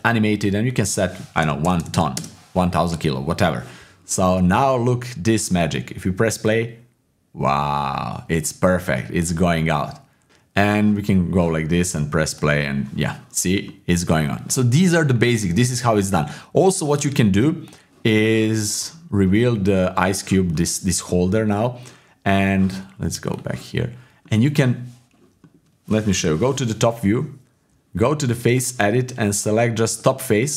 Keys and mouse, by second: 0.8-2.1 drag, 1.8 KP_0, 1.9 KP_0, 4.3-4.8 middle drag, 5.4-6.7 drag, 8.9 click, 10.7 click, 12.3-13.6 drag, 13.6 middle click, 15.3-16.6 drag, 16.8-20.5 drag, 20.5 middle click, 21.1 middle click, 24.2 click, 26.1 KP_7, 27.7 Tab, 29.2 click, 29.9 click.